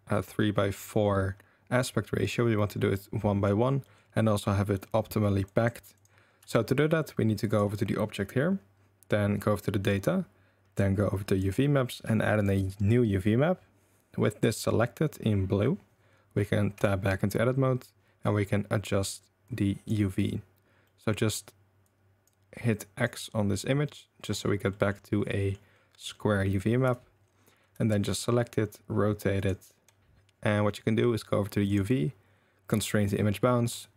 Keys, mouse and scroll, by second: 3.0-3.5 middle drag, 5.5 click, 6.4 Tab, 11.3 click, 12.3 click, 16.8 Tab, 19.5 click, 20.8 drag, 20.8 right drag, 21.9 click, 22.9 click, 24.0 click, 24.7 drag, 24.7 right drag, 25.3 middle drag, 25.8-26.2 middle drag, 26.8 a, 27.7 r, 31.7-33.0 right drag, 33.7 g.